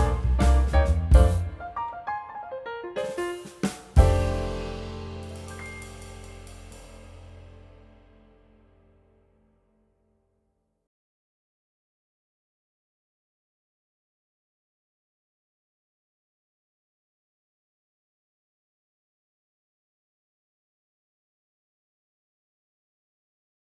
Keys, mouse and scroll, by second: 2.0 scroll down 1, 2.7 shift+click, 4.4-5.5 typing, 4.8 middle click, 5.3 scroll down 1, 5.4 middle click, 6.3 alt+middle click, 6.5 scroll up 1, 6.6 middle click, 7.5 alt+middle click, 7.7 scroll down 1, 7.8 middle click, 7.9 scroll up 1, 9.6 double click, 10.4 scroll down 2, 10.5 middle click, 10.7 scroll up 1, 10.8 e, 12.9 middle click, 13.3 alt+w, 14.6 r, 15.3-16.3 scroll up 2, 15.6 w, 17.0 alt+middle click, 17.0 scroll down 1, 17.1 middle click, 17.7 shift+click, 18.5 r, 19.2 middle click, 19.3 scroll up 1, 19.4 w, 20.2 scroll down 1, 20.8 scroll up 1, 23.1-23.4 scroll down 1, 23.5 middle click.